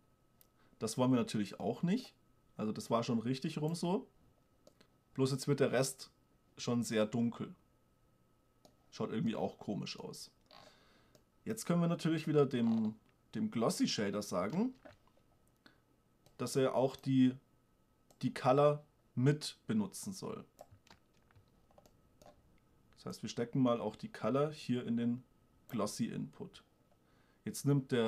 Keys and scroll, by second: 14.8 shift+space, 21.2 shift+space.